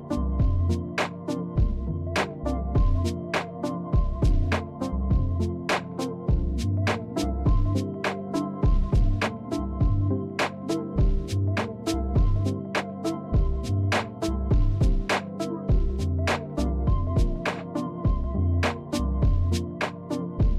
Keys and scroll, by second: 0.0-2.7 typing, 4.7-15.1 typing, 16.5-20.5 typing.